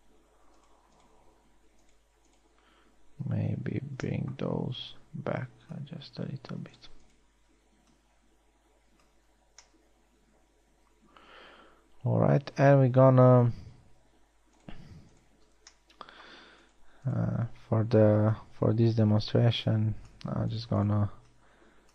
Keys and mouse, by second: 10.2 a, 16.6 middle click.